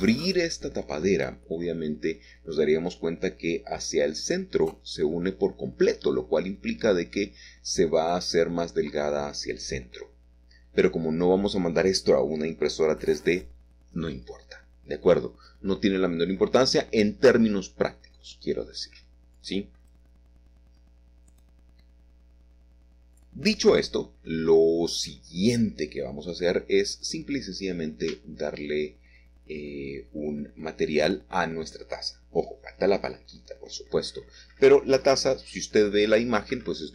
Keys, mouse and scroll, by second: 1.0 l, 1.8-3.3 shift+drag, 3.3-7.1 middle drag, 7.1 shift+click, 7.5-8.3 scroll down 1, 9.3 middle click, 11.7 middle click, 14.3 ctrl+s, 17.9-19.0 drag, 21.7-22.8 drag, 24.4-26.7 scroll down 1, 27.8-28.8 drag, 31.3 click, 32.5 click, 33.7 click, 34.9 click, 36.7-36.9 drag.